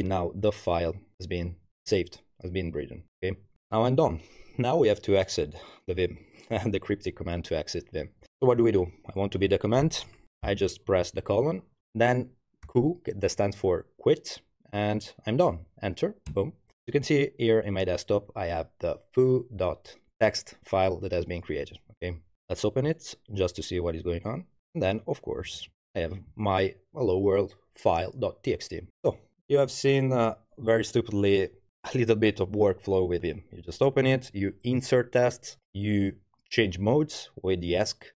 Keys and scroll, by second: 10.4 shift+., 12.7 q, 16.3 Return.